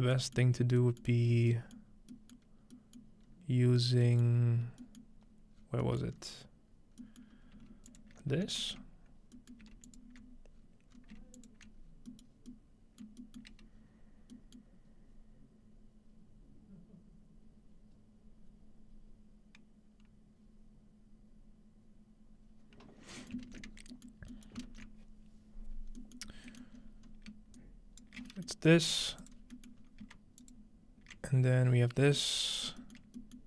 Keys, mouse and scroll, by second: 3.3-4.2 scroll up 4, 4.3 middle click, 5.0-5.8 middle drag, 5.3 scroll up 1, 5.6 scroll down 1, 6.0 middle click, 6.1 scroll up 3, 7.3 scroll up 2, 7.9-8.2 alt+shift+drag, 8.2-9.3 ctrl+alt+middle drag, 9.6 alt+shift+middle click, 9.9 alt+shift+click, 10.5 scroll down 2, 10.9 scroll up 3, 11.4 alt+shift+click, 11.7 alt+shift+click, 12.1 middle click, 12.2 scroll down 1, 12.5-13.1 alt+shift+middle drag, 13.2 shift+middle click, 14.0-14.6 middle drag, 14.6-15.3 scroll down 1, 15.3-15.7 scroll down 1, 23.7-25.4 scroll down 3, 25.7-26.7 scroll down 2, 26.2 middle drag, 26.7-27.6 middle drag, 26.7-27.1 scroll up 2, 27.6 shift+right click, 28.2-29.4 scroll up 2, 28.9 g, 29.2 click, 29.4 middle click, 30.4 click, 32.7 shift+middle click, 33.0 shift+middle click, 33.4 shift+middle click.